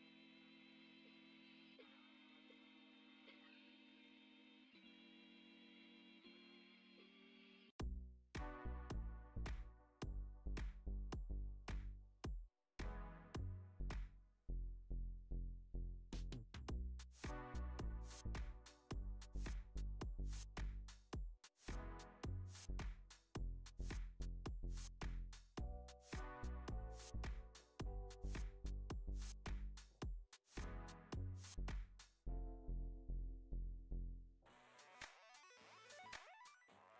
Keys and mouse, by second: 2.2 KP_1, 3.3 F6, 3.3 click, 3.8 s, 4.7 r, 6.7-7.1 middle drag, 7.3 KP_5, 7.5 middle click, 8.8 g, 10.0 click, 10.7 g, 11.4 r, 12.0 s, 12.9 g, 14.7 click, 14.9 g, 16.1 r, 17.0 g, 17.6 r, 18.6 g, 20.0 click, 22.1 middle click, 22.9 KP_5, 24.6-25.1 middle drag, 25.6 click, 26.8 click, 27.4 click, 28.0 click, 28.9 s, 30.9 g, 32.8 g.